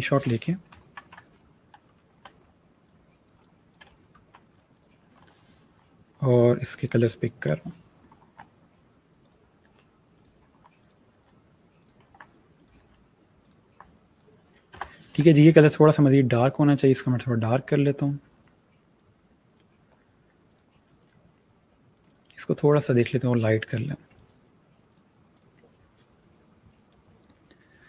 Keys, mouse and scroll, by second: 0.2 ctrl+v, 1.2 scroll down 1, 1.7-2.3 shift+scroll down 1, 2.3 shift+click, 3.5-4.1 alt+scroll up 2, 4.1 click, 6.7 click, 7.9 v, 9.0 click, 9.5-12.6 typing, 10.0 click, 10.6 click, 11.6 click, 12.4 click, 13.3 click, 13.7 v, 14.0 click, 18.8 click.